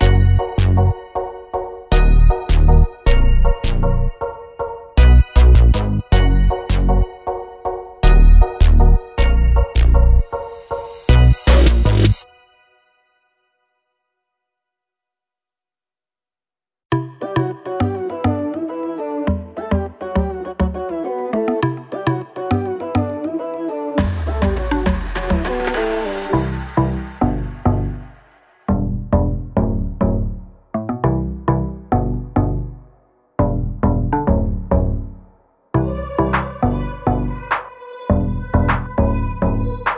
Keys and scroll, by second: 0.6 m, 3.0 space, 4.2 m, 5.7 2, 6.0 Return, 6.6 space, 7.6 p, 8.5 2, 8.7 Return, 16.6 2, 16.9 Return, 27.7 space, 30.4 l, 36.6-39.1 typing.